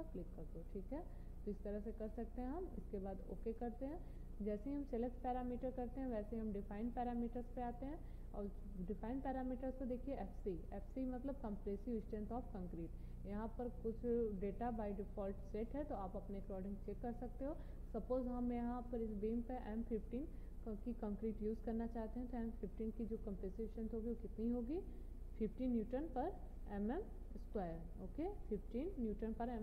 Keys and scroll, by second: 27.6 1, 28.4 5.